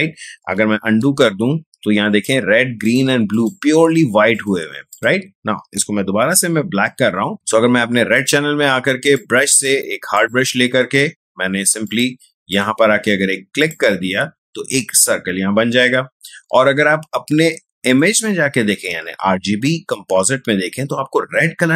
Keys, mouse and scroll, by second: 0.7 ctrl+z, 2.0 click, 6.2 ctrl+z, 7.3 click, 9.1-10.6 drag, 10.6 right click, 11.8 click, 17.8 click, 17.9 click.